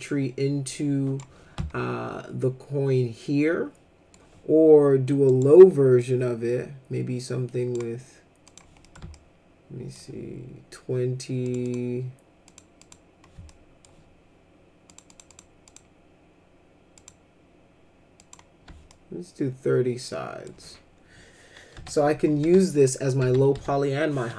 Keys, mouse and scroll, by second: 1.6-4.1 alt+middle drag, 5.3 right click, 6.0-7.7 drag, 8.5 click, 8.8 middle click, 9.1 alt+middle click, 11.4 click, 11.6 click, 12.4 click, 12.8 click, 13.5 alt+middle click, 14.9 click, 15.1 click, 15.3 click, 15.6 click, 16.9 click, 18.2 click, 18.9-20.5 alt+middle drag, 21.7 F4, 22.4 F4, 22.9 middle click, 23.2 F4, 23.5 F4.